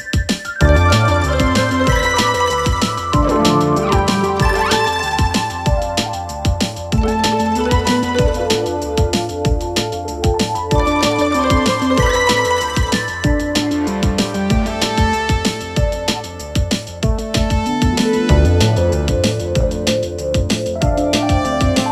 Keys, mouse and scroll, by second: 5.1 click, 6.1 click, 6.8 z, 7.5-10.6 drag, 11.2 space, 16.5 click.